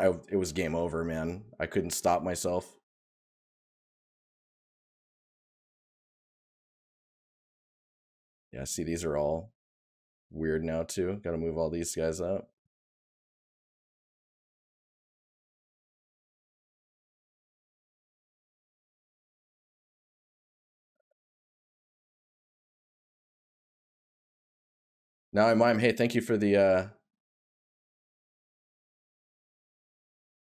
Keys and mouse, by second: 13.1 right click, 16.3 right click, 25.5 right click, 28.5 right click.